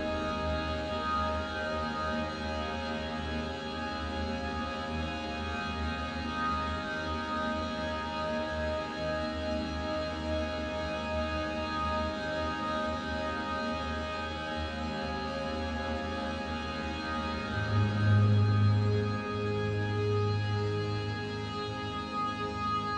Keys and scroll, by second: 1.2 a, 1.7 a, 3.2 u, 11.8 Tab.